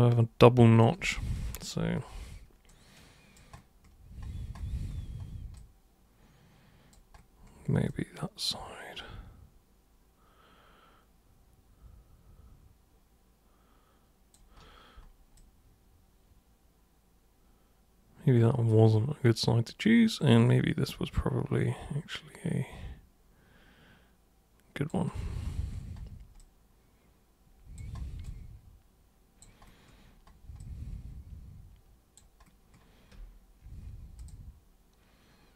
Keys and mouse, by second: 2.7 alt+super+click, 5.5-6.9 alt+super+drag, 7.8-14.3 alt+super+drag, 15.4-19.7 drag, 19.9-24.9 alt+super+drag, 26.4-27.7 drag, 28.2-29.4 drag, 30.6-32.1 alt+super+drag, 34.2 super+click.